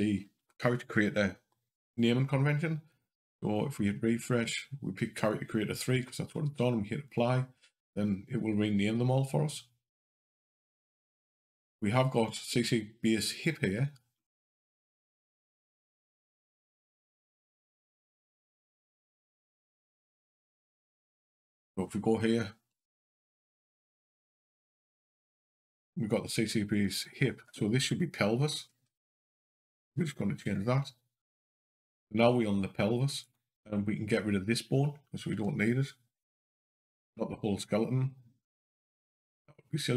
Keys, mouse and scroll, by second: 2.7 click, 3.6 click, 9.9 click, 14.0 scroll down 2, 15.9 click, 17.6 click, 18.4 scroll up 2, 21.3 click, 22.6 Up, 23.1 Up, 26.6 click, 26.7 click, 33.0 click, 35.3 Delete, 36.9 ctrl+z, 38.9 click.